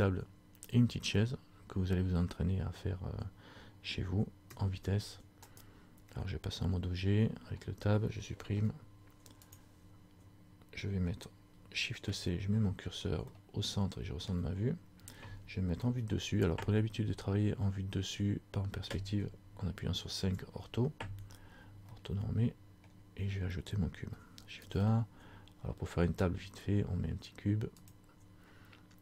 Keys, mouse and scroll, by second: 4.5 Escape, 5.8 right click, 6.7 Tab, 8.7 Delete, 12.2 shift+c, 13.5 shift+middle click, 14.8-15.3 scroll up 1, 15.9 KP_7, 20.2 KP_5, 22.0 shift+scroll up 1, 22.1 shift+middle click, 23.1-23.5 shift+scroll down 1, 24.6 shift+a.